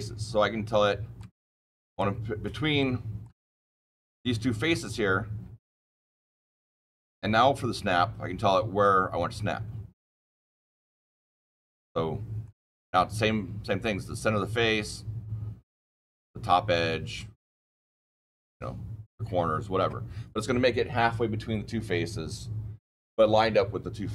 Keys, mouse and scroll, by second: 0.5-1.1 shift+middle click, 0.9 shift+middle click, 1.8 click, 2.7 shift+middle click, 3.0 shift+middle click, 3.1 shift+middle click, 3.5 click, 4.7 click, 6.9 click, 10.6 click, 11.8-12.4 shift+middle click, 12.0-12.9 typing.